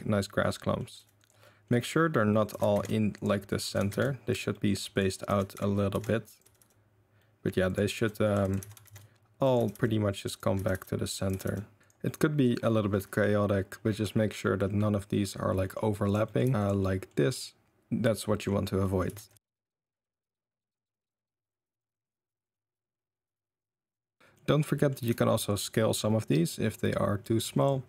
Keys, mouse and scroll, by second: 0.9 r, 1.5 middle click, 2.5 g, 3.5 click, 3.6 g, 4.5 middle drag, 4.9 click, 5.2 g, 6.4 r, 7.2 middle drag, 7.6 click, 7.9-11.8 typing, 8.4 click, 12.0-12.4 middle drag, 12.6-13.7 middle drag, 14.1-15.6 middle drag, 15.7 middle click, 16.0 click, 16.1 middle click, 16.3 middle click, 16.4 r, 17.1-17.6 middle drag, 18.4-18.8 middle drag, 19.0-19.4 ctrl+middle drag, 19.1 ctrl+z, 19.3 ctrl+z, 19.3-19.9 typing, 19.5 click, 19.6 click, 20.6 click, 20.9 drag, 20.9-25.1 typing, 21.3 click, 21.8 click, 22.5 drag, 22.6 click, 22.8 click, 23.1 click, 23.7 middle drag, 24.0 middle click, 24.2 middle click, 25.7-26.3 middle drag, 26.6 middle drag, 27.2 middle drag, 27.8 s.